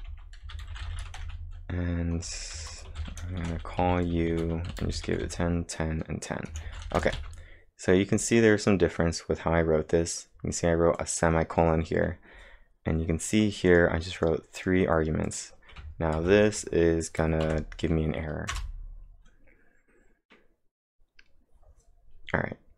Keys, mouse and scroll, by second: 0.0-5.1 typing, 6.4-7.2 typing, 8.6-9.4 scroll down 2, 9.4-10.7 scroll up 1, 11.0 click, 13.4 click, 13.7 click, 14.2 click, 16.2 ctrl+`, 17.5 Up, 18.5 Return, 20.3-21.0 typing.